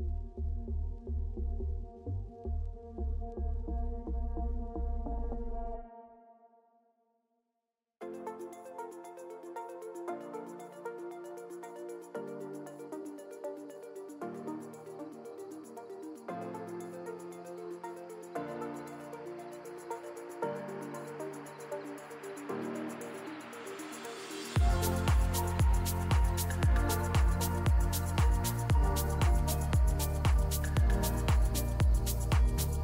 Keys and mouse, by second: 0.2 click, 0.2 middle drag, 0.5 Tab, 1.1 ctrl+r, 4.4 Tab, 4.9 click, 5.2-5.6 middle drag, 6.5 /, 6.8-7.1 middle drag, 7.1 click, 7.1 Tab, 7.5 click, 8.0 KP_7, 10.1 1, 10.5 click, 12.4 j, 12.9 Tab, 13.3 middle click, 13.9 click, 14.0 Tab, 14.4 middle click, 15.6 ctrl+r, 17.9 s, 19.7 Tab, 20.6 /, 21.0 click, 21.5 middle drag, 22.1 middle click, 22.5 click, 22.7 Tab, 23.0 middle click, 23.6 middle click, 24.2 1, 25.8 ctrl+KP_Add, 27.0 x, 27.9 middle click, 28.3 2, 28.9 alt+click, 29.4 f, 29.8 Tab, 30.0-30.6 middle drag, 30.9 shift+middle click, 31.4 Tab, 31.9 3, 32.1 click, 32.4 g.